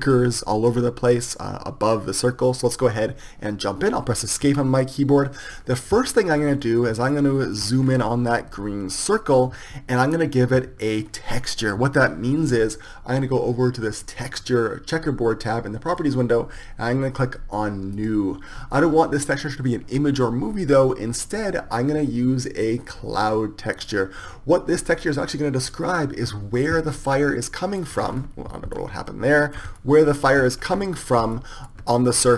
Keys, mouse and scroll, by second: 4.6 Escape, 6.5 middle click, 7.3-12.8 middle drag, 27.7-32.3 middle drag.